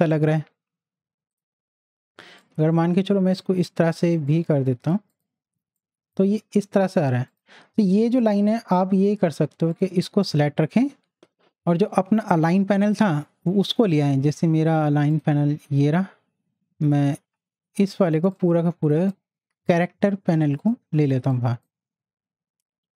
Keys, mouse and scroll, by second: 1.3-5.1 drag, 5.5 z, 5.8 click, 15.1 click, 18.3 click.